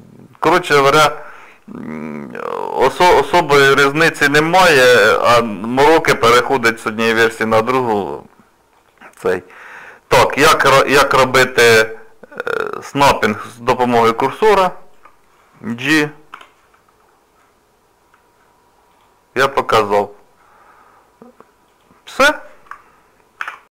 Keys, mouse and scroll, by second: 12.5 click, 14.2 shift+right click, 16.3 g, 19.7 shift+middle click, 21.7 click.